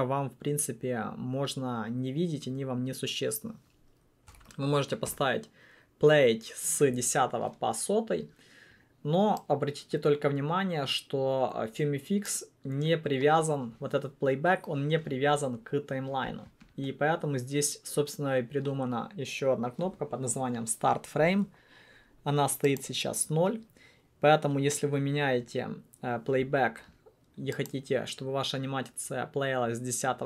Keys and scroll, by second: 4.2-5.0 typing, 5.2 Return.